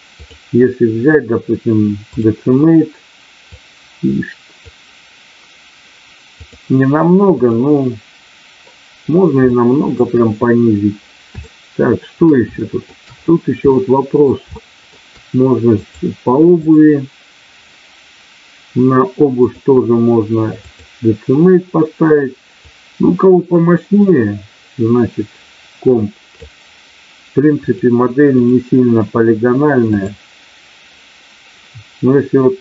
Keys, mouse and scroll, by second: 0.2-2.2 drag, 3.7 click, 6.3-7.7 drag, 9.4 shift+middle click, 11.4 shift+middle click, 12.5 shift+middle click, 13.6 middle click, 14.6 shift+middle click, 15.7 click, 16.5 click, 19.4-20.7 drag, 22.6-26.3 drag, 27.7 click, 29.8 click.